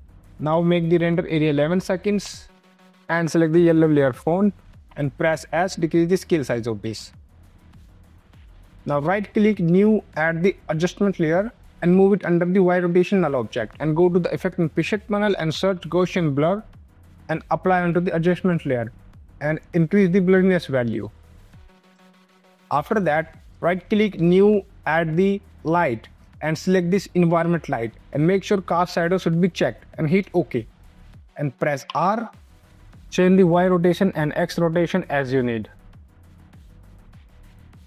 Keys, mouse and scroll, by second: 0.8 click, 1.9 space, 3.1 click, 4.4 s, 4.7 ctrl+z, 5.5 click, 6.7 space, 8.7 right click, 9.4 click, 11.6 ctrl+z, 12.1 click, 14.2 click, 15.0-16.3 typing, 16.9 click, 20.4 click, 23.4 right click, 24.1 click, 31.8 r, 33.3 click, 35.9 KP_3, 36.0 KP_6, 36.2 Return, 37.0 ctrl+s, 37.6 click.